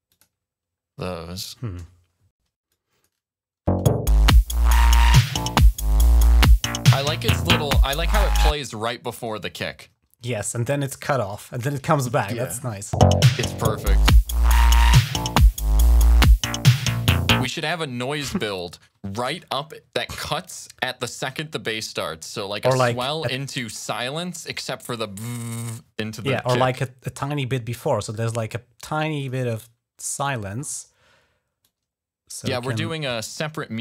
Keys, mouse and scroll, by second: 2.5 click, 3.5 space, 8.4 space, 9.8 ctrl+scroll up 2, 12.5 click, 12.9 space, 17.3 space, 19.1 ctrl+s, 20.8 ctrl+scroll up 1, 23.2 click, 25.3-25.6 ctrl+scroll down 2, 27.6 click, 29.0 click, 30.0 click, 31.4-32.6 drag, 33.2-33.8 alt+drag.